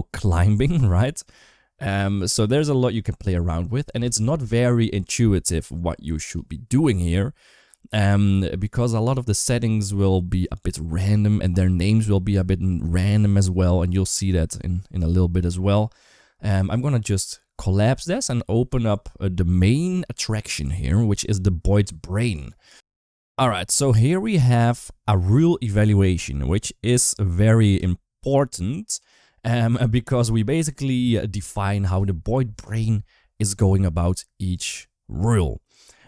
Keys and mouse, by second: 5.3 click, 16.5 click, 21.5 click, 25.0 click.